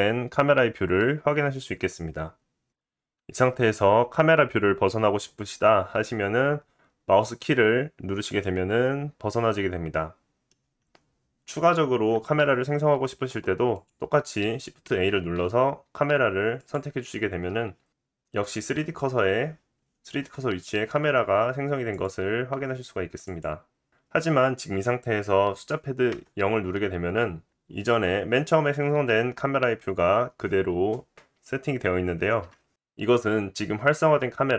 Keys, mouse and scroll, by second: 2.7 KP_0, 6.7-7.1 scroll down 1, 8.6-9.1 scroll down 3, 9.0-9.6 drag, 9.6 middle click, 10.9-12.3 scroll down 1, 13.7 click, 14.8 shift+a, 19.2 g, 22.2-25.6 middle drag, 22.6 g, 26.9 KP_0.